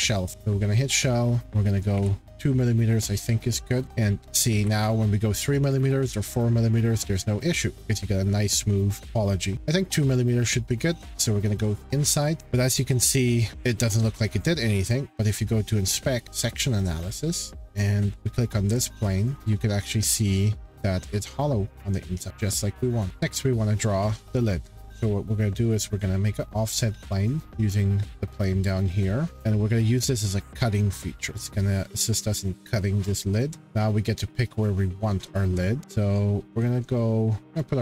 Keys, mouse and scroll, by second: 0.3 click, 1.4 click, 2.0 2, 3.8 click, 3.8 2, 4.1 click, 4.3 click, 4.6 3, 5.5 click, 5.7 click, 5.8 4, 7.7 2, 11.0 click, 12.8-13.5 scroll, 14.0 shift+middle click, 14.0-15.3 shift+scroll, 15.3 click, 16.4 click, 17.8 click, 18.0 scroll, 18.5 click, 19.4 shift+middle click, 20.3 middle click, 20.4 middle click, 22.8-23.1 scroll, 23.0 click, 25.8 click, 27.4 shift+middle click, 28.1 click, 29.3 click, 30.2 click, 31.3-31.7 scroll, 37.5 click.